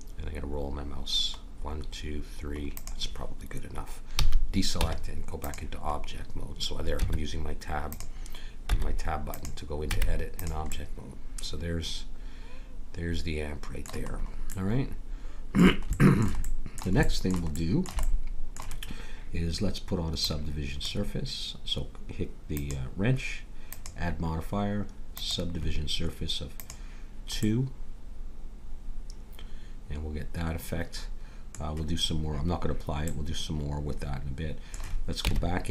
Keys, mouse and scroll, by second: 4.1 a, 4.7 Tab, 7.0 Tab, 8.6 Tab, 9.8 Tab, 10.7-12.2 middle drag, 14.1-15.5 middle drag, 20.2-21.9 drag, 22.5-25.4 drag, 26.6-28.4 drag, 27.4-29.3 middle drag, 33.0 middle click, 35.2 Tab.